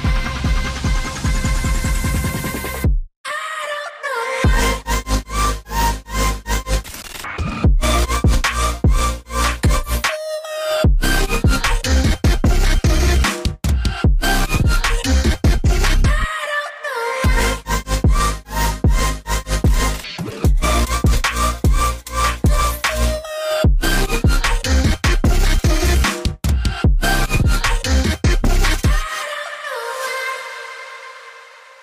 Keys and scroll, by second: 18.6-19.2 typing, 19.8 Return, 22.4-23.1 typing, 24.4-25.1 typing.